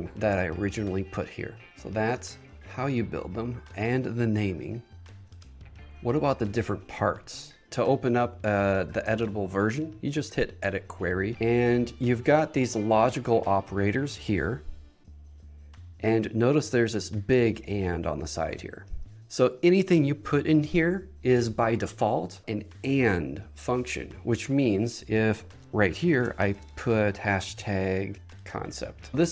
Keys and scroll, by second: 26.5 shift+3, 28.1 Down.